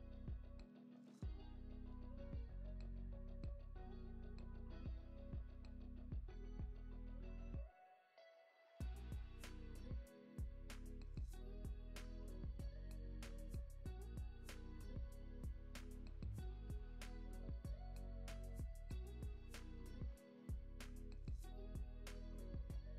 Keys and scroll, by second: 5.6 space, 12.1 space, 12.3 super+s, 12.9 space, 17.0 x, 18.1 x, 18.8 super+s, 19.3 z, 19.9 x, 21.9 x.